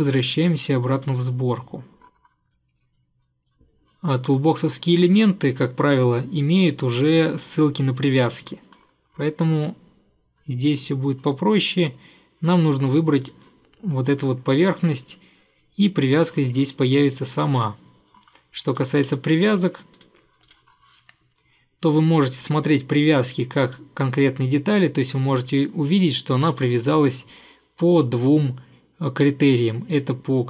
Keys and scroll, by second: 19.1 Delete.